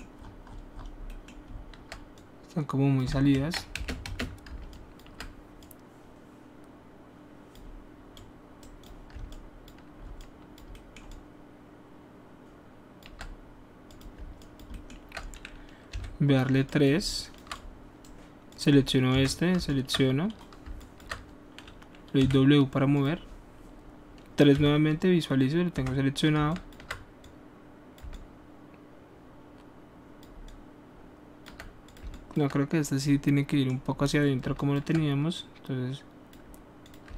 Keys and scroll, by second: 3.3 ctrl+z, 3.7-4.4 typing, 15.9 3, 16.4 alt+3, 19.1 1, 22.2 w, 24.5 3, 25.7 1.